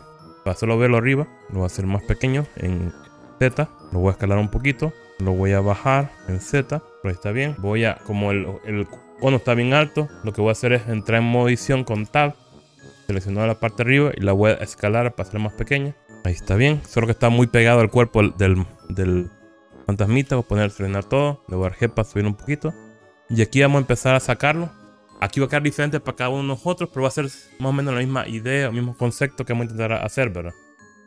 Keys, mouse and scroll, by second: 1.3 z, 1.7 click, 2.7 s, 3.7 z, 3.8 click, 4.5 s, 5.1 click, 6.1 g, 6.2 z, 7.1 click, 7.6 middle click, 12.2 Tab, 13.3 click, 15.1 s, 16.0 KP_1, 20.3 a, 21.7 g, 23.0 z, 24.2 click.